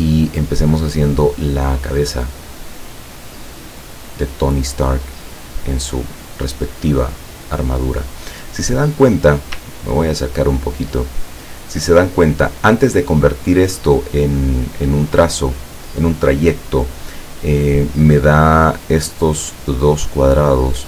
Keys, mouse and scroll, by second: 3.3-6.1 drag, 9.9-10.6 ctrl+scroll up 4, 11.3-12.8 ctrl+middle drag.